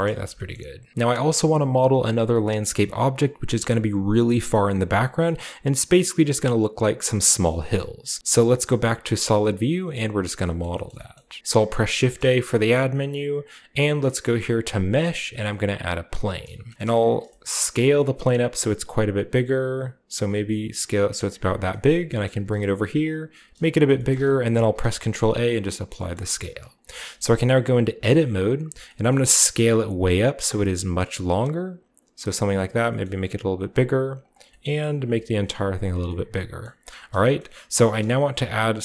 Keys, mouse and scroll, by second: 0.1 a, 0.5-8.2 middle drag, 8.2-9.7 typing, 9.9 middle drag, 10.0-10.9 scroll down 1, 10.4-11.4 shift+middle drag, 10.9-11.4 scroll up 1, 11.4 alt+h, 12.0 shift+a, 15.8 click, 16.5-16.8 scroll down 2, 16.8-18.3 shift+middle drag, 16.8-17.9 shift+scroll up 2, 17.8 s, 21.3-23.5 drag, 21.5-22.1 scroll down 1, 22.0 shift+g, 22.1-23.5 scroll up 2, 23.3 s, 23.8 click, 23.9 g, 24.2 drag, 24.6 ctrl+a, 25.5 click, 25.8-26.9 shift+drag, 27.9 Tab, 28.7 s, 28.8-30.3 scroll up 1, 29.1-30.6 middle drag, 32.3-33.9 drag, 32.8 s, 34.2-37.0 drag, 34.4 s, 35.1 s, 36.0-36.7 scroll down 1, 36.7-37.8 scroll up 1, 37.4-38.8 middle drag, 37.8 scroll down 2.